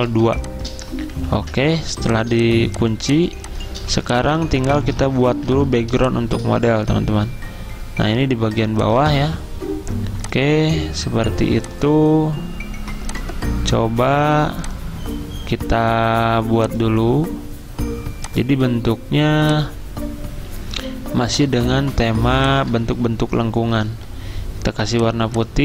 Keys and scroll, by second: 1.3 ctrl+2, 3.9 typing, 5.5 typing, 23.7 d.